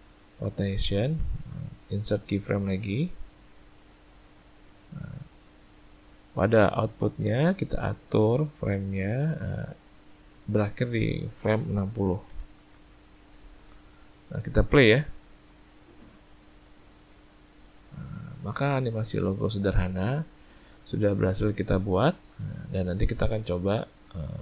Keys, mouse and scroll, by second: 1.1 right click, 7.6 click, 10.4 click, 14.9 click.